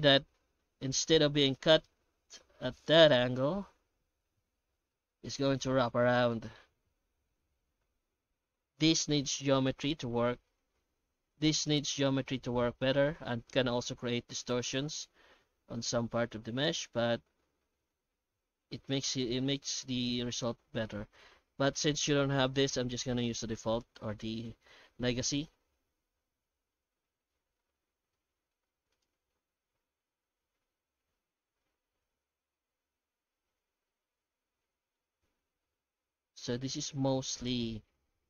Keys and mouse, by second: 0.2 F9, 5.1 F9, 35.0-36.5 middle drag.